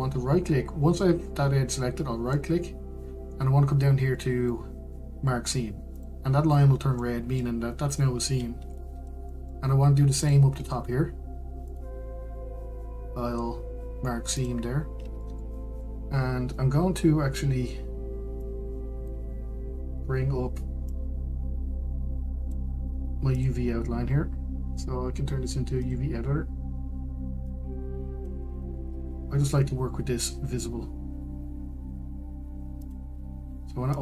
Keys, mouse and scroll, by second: 8.3-11.6 middle drag, 11.6 click, 15.8 right click, 16.1-16.5 scroll down 1, 16.5-20.3 shift+middle drag, 20.3-34.0 drag.